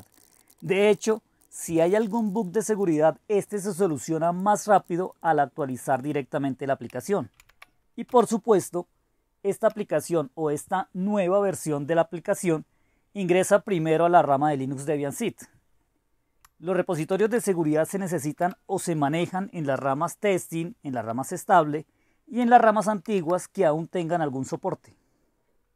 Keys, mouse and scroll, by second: 0.0-3.4 typing, 3.4 Up, 3.9 ctrl+k, 4.2 ctrl+k, 4.7 ctrl+k, 4.8 ctrl+k, 5.0 Down, 5.1 Down, 5.2 Down, 5.6 Down, 5.6 Down, 5.9 Up, 6.0 Up, 6.1 Down, 7.4 shift+3, 8.1 space, 9.7 Up, 10.2 Up, 10.2 Up, 17.1 ctrl+o, 18.4 Return, 23.1 ctrl+x.